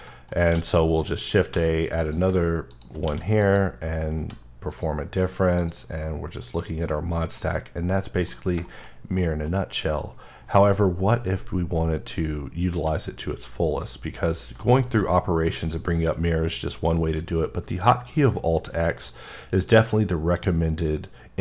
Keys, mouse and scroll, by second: 0.3 shift+right click, 0.5 shift+a, 1.2 click, 1.5 s, 2.0 click, 2.7 click, 3.0 q, 3.4 click, 4.0 scroll up 1, 4.2 s, 4.7 click, 5.1-5.6 scroll down 1, 5.6 click, 7.1 middle click, 8.8-9.2 shift+scroll down 2, 9.2 middle click, 9.5-11.7 scroll down 2, 12.7 scroll down 2, 12.7 q.